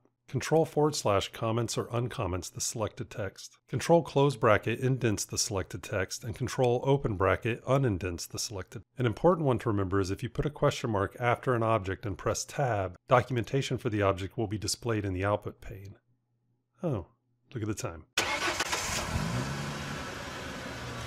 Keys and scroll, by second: 1.1 ctrl+/, 4.0 ctrl+], 6.7 ctrl+[, 12.4 Tab.